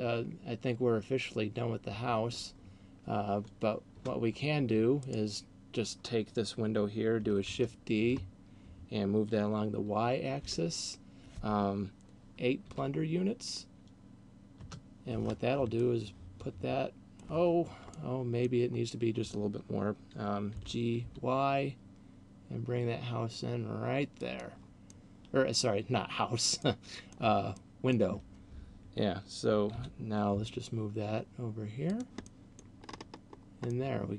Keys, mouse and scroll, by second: 2.0 Escape, 4.0 KP_0, 5.0 right click, 7.5 shift+d, 15.8 middle click, 17.8 middle click, 20.5 g, 24.3 click, 25.0 middle click, 26.3 middle click, 27.5 middle click, 29.8 g, 32.0 click, 32.3 middle click, 32.8-33.7 scroll up 5, 33.8 middle click.